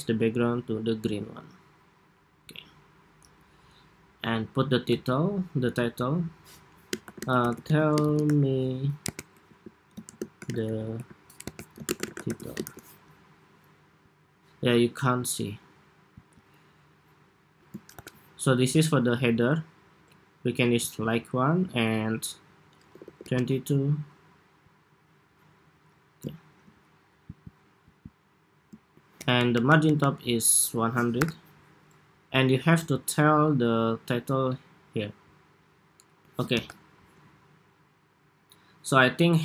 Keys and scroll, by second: 12.7 Escape, 17.6 super+=, 29.5 alt+Up, 29.9 alt+Up, 31.0 super+-, 36.2 super+=.